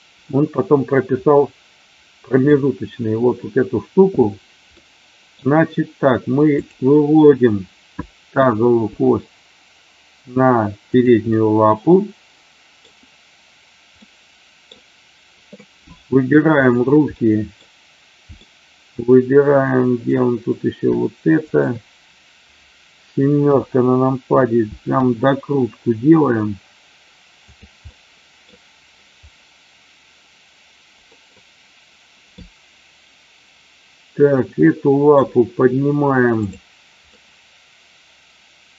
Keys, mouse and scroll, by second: 4.7-5.2 middle drag, 6.5 click, 8.9 g, 10.9 click, 11.2-12.7 middle drag, 13.9 middle click, 17.1-17.6 middle drag, 18.4-20.0 middle drag, 21.4 shift+click, 25.0 r, 27.4 click, 27.8-28.4 middle drag, 31.3 middle click, 32.4-35.2 middle drag, 37.2-38.7 middle drag.